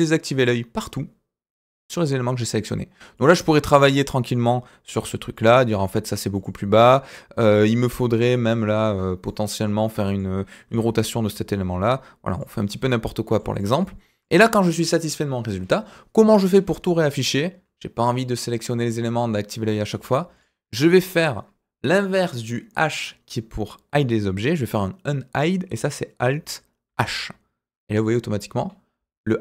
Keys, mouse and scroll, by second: 3.1 click, 3.4 scroll up 1, 3.6 shift+middle click, 5.3 click, 5.6 g, 7.7 click, 8.6-9.2 middle drag, 9.5 click, 9.8-10.1 middle drag, 10.7 r, 12.5 scroll down 1, 12.8-13.3 middle drag, 13.5 click, 13.8-14.2 middle drag, 14.5 shift+middle drag, 15.1-15.7 middle drag, 20.3 click, 20.7-21.1 middle drag, 26.8 alt+h.